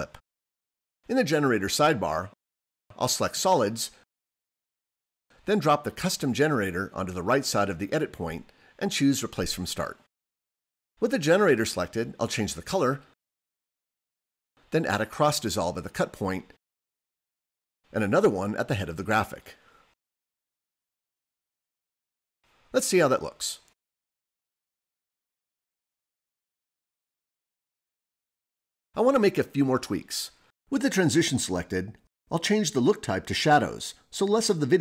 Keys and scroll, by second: 16.2 super+t, 20.3 super+t.